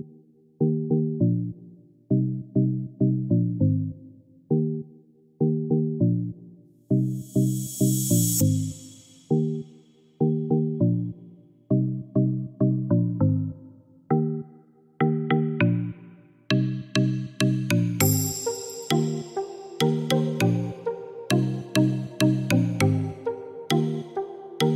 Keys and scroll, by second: 0.0-0.3 typing, 11.2-13.2 typing, 20.5 6, 20.9 3, 21.1 Return.